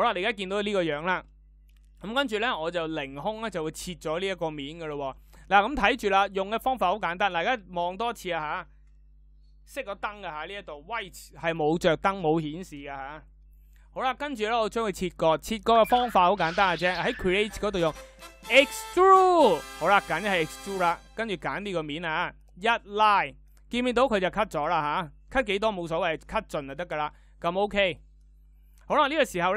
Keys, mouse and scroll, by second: 15.6 e.